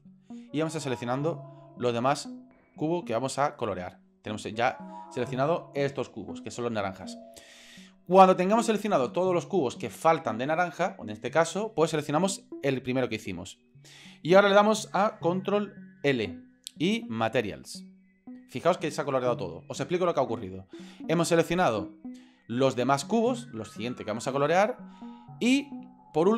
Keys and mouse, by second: 1.3 shift+right click, 1.7-2.3 shift+right drag, 3.2 shift+right click, 12.9 shift+right click, 16.0 ctrl+l.